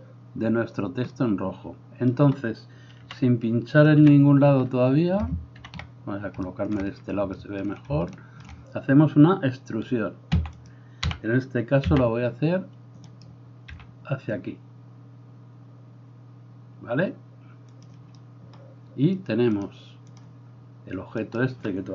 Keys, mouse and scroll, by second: 3.1 KP_1, 4.0 KP_3, 5.6 ctrl+KP_3, 10.4 e, 10.8-19.6 middle drag, 11.1 g, 13.7 g, 19.6-21.9 drag, 21.2 middle click, 21.2 right click.